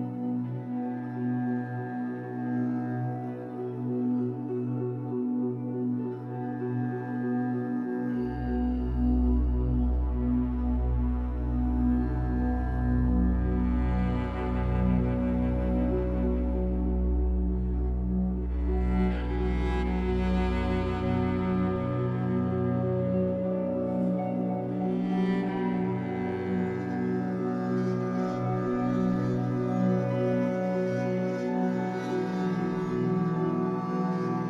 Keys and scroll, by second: 1.0 Escape, 11.0 w, 12.1 r, 14.7 Escape, 16.4 1, 18.4 2, 20.8 alt+c, 23.5 ctrl+z, 24.4 Escape, 25.0 3, 30.0 Escape, 32.4 c.